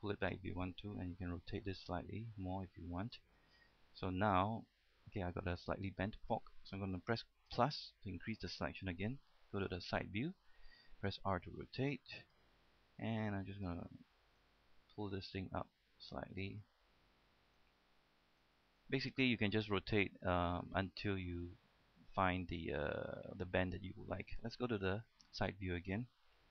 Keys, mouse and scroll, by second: 1.4 r, 3.3 click, 3.7 scroll down 1, 3.9-6.9 middle drag, 9.8 KP_3, 11.6 r, 12.6 click, 14.6 right click, 15.3 click, 17.2 middle click, 17.7 right click, 18.9 scroll down 1, 19.1-24.9 middle drag, 24.9 KP_3, 25.8-26.5 scroll down 1.